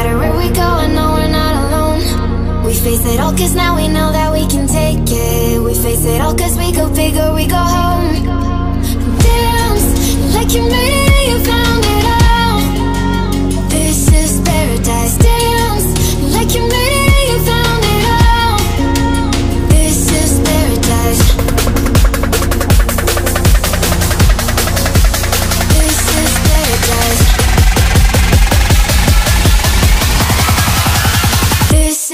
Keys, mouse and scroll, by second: 0.0 ctrl+2, 2.1 click, 5.0 click, 6.4-11.6 drag, 15.0-23.5 alt+drag, 23.5 d, 24.1 click, 26.0 click, 30.1 click.